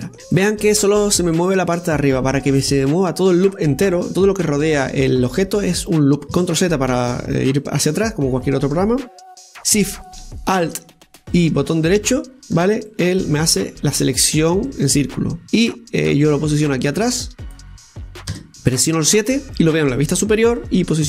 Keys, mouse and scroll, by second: 0.1-2.1 middle drag, 2.1-2.8 scroll up 1, 2.8-6.3 middle drag, 7.3 ctrl+z, 8.0 scroll up 1, 8.2 scroll down 1, 8.5 middle click, 9.1 right click, 12.2 alt+shift+right click, 12.5 alt+shift+right click, 13.8-16.4 middle drag, 16.4-18.5 drag, 18.5 KP_7.